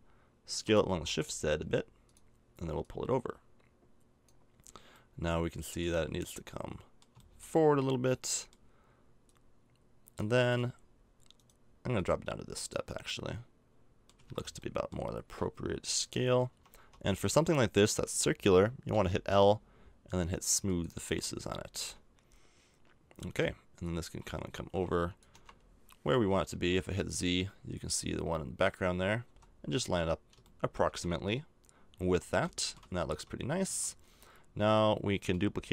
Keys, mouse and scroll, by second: 0.5 s, 2.8 click, 4.9 middle click, 5.6 middle click, 6.4-9.2 middle drag, 9.2-11.3 drag, 14.1 a, 14.2 Tab, 16.5 Tab, 16.8 Tab, 17.3 Tab, 18.9 l, 21.1 a, 23.8-24.9 drag, 25.3 KP_0, 26.5 z, 29.2 z, 32.0 a, 33.0 Tab, 33.6 Tab.